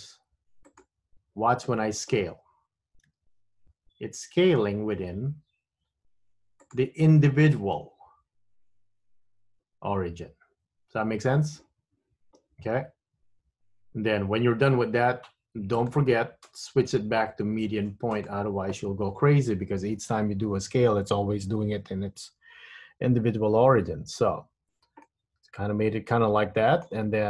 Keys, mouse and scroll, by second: 3.2 s, 16.0 click, 23.5 Tab, 24.5-25.2 scroll down 1, 25.2 middle click.